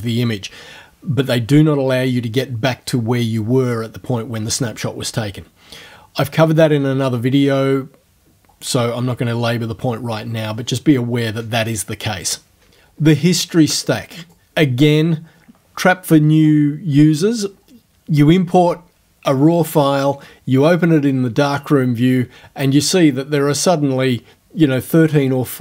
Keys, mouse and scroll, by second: 14.2 click.